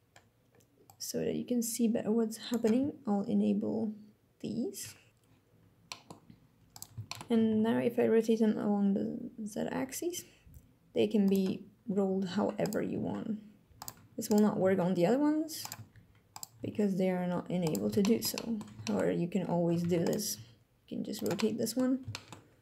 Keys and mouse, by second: 0.6-2.2 drag, 4.9 click, 5.5 click, 6.7 shift+click, 7.0 r, 7.2 z, 10.9 click, 12.0 alt+r, 12.6 r, 12.6 z, 13.4 click, 14.2 r, 15.3 click, 16.2 r, 16.3 z, 17.3 click, 17.7 shift+drag, 18.0-18.3 drag, 18.5 shift+drag, 19.5 ctrl+Tab, 19.7 click, 20.0 r, 20.8 click, 21.0-21.5 middle drag, 21.8 shift+middle drag.